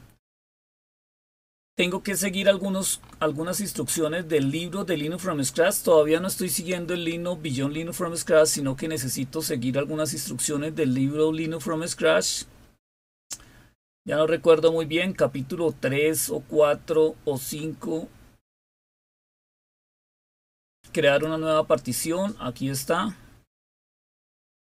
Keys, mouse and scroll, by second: 0.0 click, 0.9-8.4 scroll up 9, 8.4-10.4 scroll up 1, 11.1-11.9 scroll down 2, 12.2-13.2 scroll down 3, 15.0-15.9 scroll down 2, 17.4-18.6 scroll up 2, 19.0-19.9 scroll up 2, 20.9 click, 21.5 click, 22.8 scroll down 2, 23.6-24.6 scroll down 4.